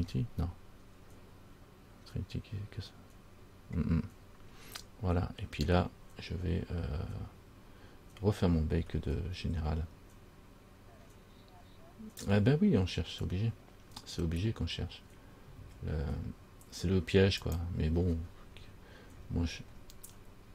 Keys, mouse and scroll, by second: 17.6 click, 18.2-20.5 scroll down 13.